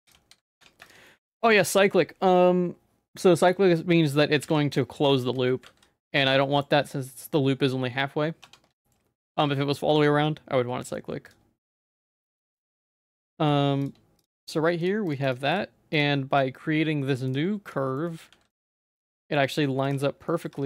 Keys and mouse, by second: 0.0 ctrl+z, 0.1 ctrl+z, 0.6 Tab, 1.1 middle click, 1.5 ctrl+s, 4.5 ctrl+s, 5.2 shift+middle click, 5.7 ctrl+s, 6.4 middle click, 6.8 Tab, 8.4 Tab, 8.8 shift+middle click, 9.4 ctrl+s, 10.8 middle click, 11.3 click, 12.3 h, 12.6 middle click, 12.8 ctrl+z, 13.3 middle click, 13.8 shift+click, 14.5 right click, 15.1 click, 15.2 right click, 15.9-17.3 right drag, 18.0 shift+middle click, 18.4 ctrl+s, 18.5 middle click, 19.9 Tab, 20.3 middle click, 20.5 2.